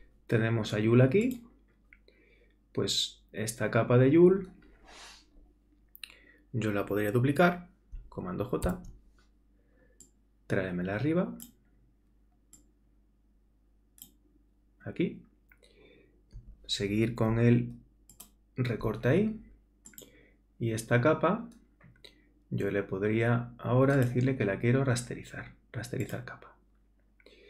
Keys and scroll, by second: 8.7 super+j.